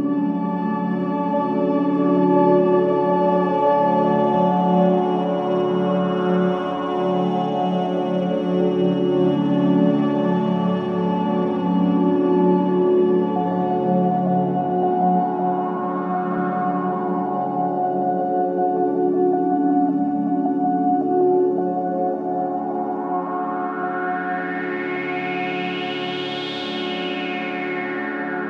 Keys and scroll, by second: 8.1 Escape, 8.3 ctrl+z, 16.9 F9, 18.5 4, 19.5 3, 25.3 shift+i.